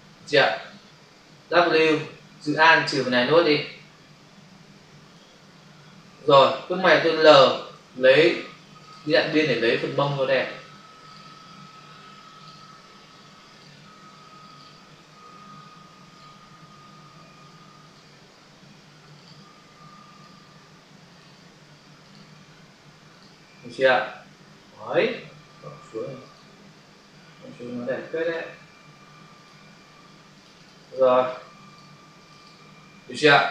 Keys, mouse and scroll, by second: 2.5 alt+click, 7.8 l, 8.8 shift+click, 9.8 click, 13.4 click, 16.0 click, 17.7 click, 17.8 click, 20.1 click, 20.2 click, 21.9 click, 22.1 click, 26.1 click, 26.3 click, 28.1 click, 28.3 click, 30.2 click, 30.3 click, 30.5 double click, 30.7 click, 30.9 click, 31.0 click, 31.2 double click, 31.6 click, 31.7 click, 32.0 click, 32.2 double click, 32.4 click.